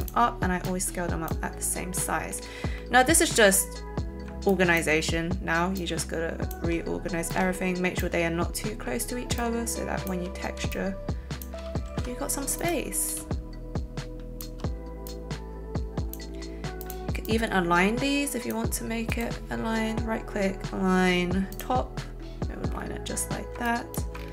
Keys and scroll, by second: 11.8 ctrl+shift+z.